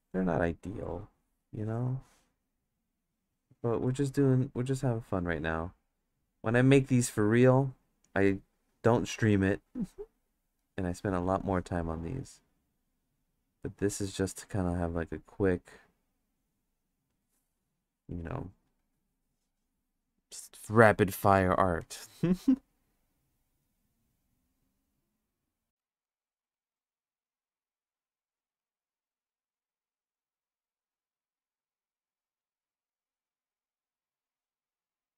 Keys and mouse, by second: 3.0-4.0 drag, 4.5 click, 5.9-7.1 drag, 7.8-10.7 drag, 12.4-14.5 drag, 15.3-17.0 drag, 21.8-25.7 drag, 25.7 ctrl+z, 25.8 ctrl+z, 26.1 ctrl+z, 26.6 ctrl+z, 27.9 click, 28.6 ctrl+z, 29.3-30.8 drag, 31.2-32.4 drag, 33.5 click, 34.0 click.